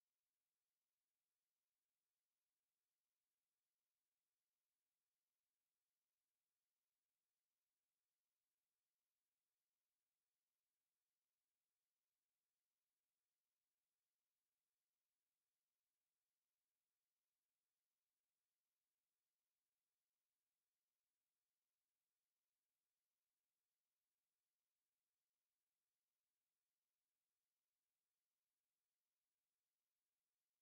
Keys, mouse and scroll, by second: 1.6 click, 2.5-5.3 drag, 5.6 right click, 6.6 click, 8.2 click, 10.8 click, 16.8 ctrl+click, 18.6 click, 19.3 click, 23.0 click, 29.8-30.6 drag.